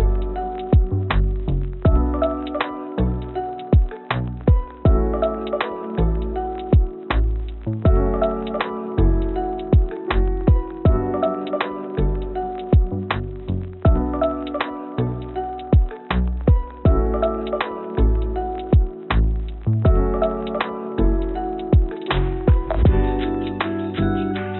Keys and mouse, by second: 1.3 ctrl+z, 1.6 ctrl+z, 2.9 ctrl+z, 3.6 ctrl+z, 4.7 ctrl+b, 6.2 ctrl+z, 6.7 ctrl+z, 6.9 ctrl+z, 7.0 ctrl+z, 7.2 ctrl+z, 7.3 ctrl+z, 7.4 ctrl+z, 7.5 ctrl+z, 7.6 ctrl+z, 7.8 ctrl+z, 7.9 ctrl+z, 8.0 ctrl+z, 8.1 ctrl+z, 8.3 ctrl+z, 8.4 ctrl+z, 8.8 ctrl+z, 8.9 ctrl+z, 9.8 ctrl+z, 10.3 ctrl+z, 10.4 ctrl+z, 10.6 ctrl+z, 10.8 ctrl+z, 10.9 ctrl+z, 12.0 ctrl+z, 12.2 ctrl+z, 12.3 ctrl+z, 12.6 ctrl+z, 12.9 ctrl+z, 13.1 ctrl+z, 13.7 a, 14.4 click, 14.9 click, 15.7 Tab, 16.8 a, 17.5 ctrl+b, 22.4 click.